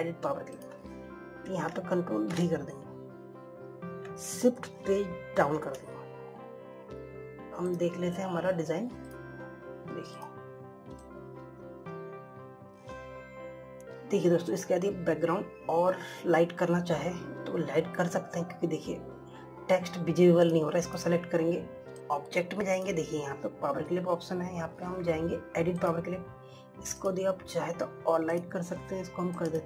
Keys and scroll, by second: 3.4 ctrl+v.